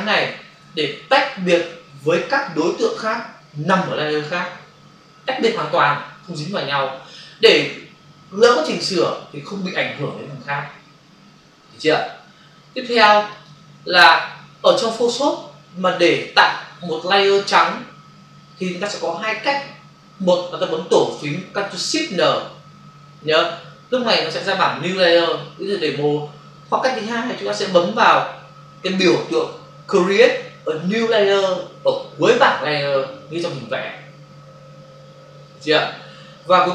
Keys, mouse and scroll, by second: 13.2 click.